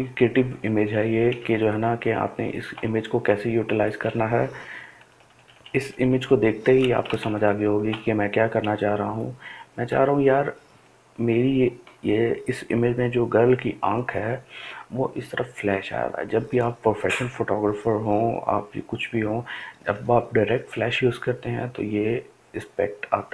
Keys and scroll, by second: 7.9 [.